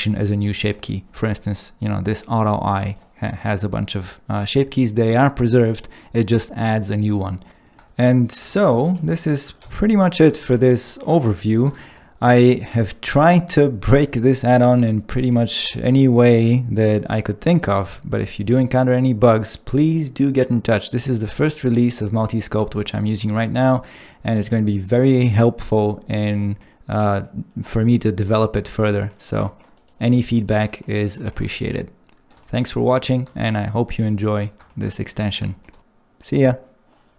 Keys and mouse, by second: 2.8 click, 8.6 shift+4, 10.0 middle click, 10.4 ctrl+middle click, 21.9 click, 28.9 middle click, 29.8 click, 30.1 click, 30.4 click, 30.7 middle click, 31.4 middle click.